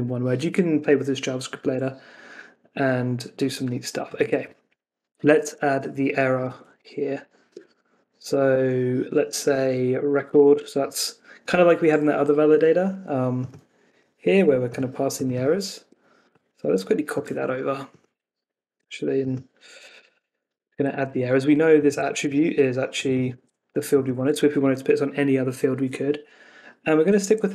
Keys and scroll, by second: 5.7 Down, 7.0 Up, 7.5 Escape, 15.7 Escape, 17.2 super+c, 19.9 super+v, 20.5 Escape, 22.2 super+c, 23.3 super+v, 24.2 super+s, 27.2 super+s.